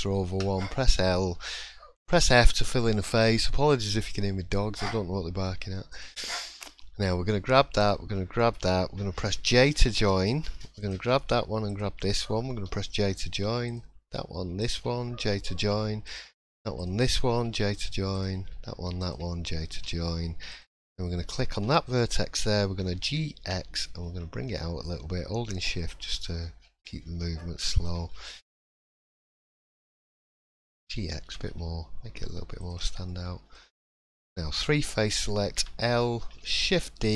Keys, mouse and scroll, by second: 0.4 l, 2.1 f, 5.9 click, 6.3 middle click, 7.8 shift+click, 8.1 shift+middle click, 8.5-8.9 scroll up 2, 9.4 j, 9.7-10.0 scroll down 2, 10.0 middle click, 10.8 click, 11.7 shift+click, 12.5 j, 13.7 click, 14.6 shift+click, 15.2 j, 16.1 click, 16.8 shift+click, 17.4 j, 18.1 click, 19.0 shift+click, 19.7 j, 20.5 click, 20.9 middle click, 21.7 shift+middle click, 22.0 scroll up 1, 22.9-23.6 scroll up 1, 22.9 g, 28.0 scroll down 4, 28.3 middle click, 28.9 shift+middle click, 29.3-29.6 scroll up 2, 29.5 middle click, 30.8 g, 32.9-33.6 scroll down 3, 33.1 middle click, 33.6-34.5 scroll up 3, 33.9 middle click, 34.5 3, 35.6 l, 36.6 shift+d.